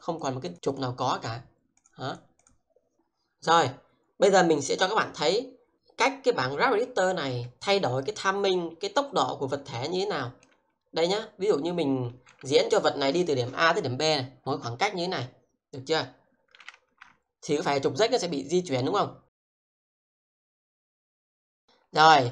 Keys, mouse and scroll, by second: 0.2 click, 0.5 click, 1.1 double click, 1.8 click, 2.1 double click, 2.4 click, 10.5 shift+middle click, 14.0 click, 15.1-15.9 scroll down 1, 15.9 click, 16.5 f, 19.0 scroll down 1, 19.6 alt+shift+right click, 20.5 alt+middle click.